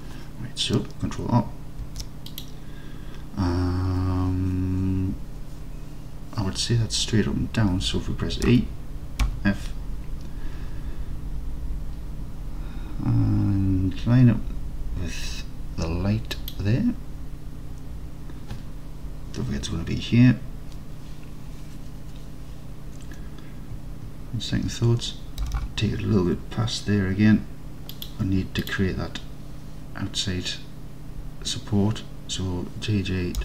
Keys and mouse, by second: 1.9 ctrl+r, 8.5 e, 9.3 f, 16.4 click, 25.5 g, 25.7 g, 28.0 click.